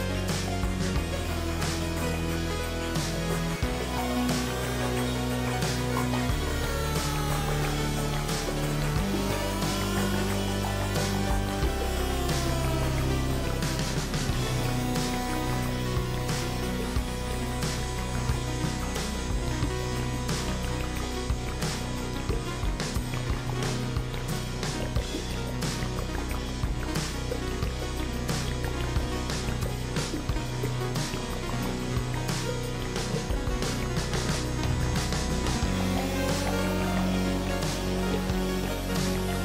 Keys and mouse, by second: 0.8 ctrl+z, 1.4 g, 7.4 shift+middle click, 9.1 shift+middle click, 15.3 shift+middle click, 17.4 shift+middle click, 20.2 KP_Decimal, 23.2 s, 28.9 click.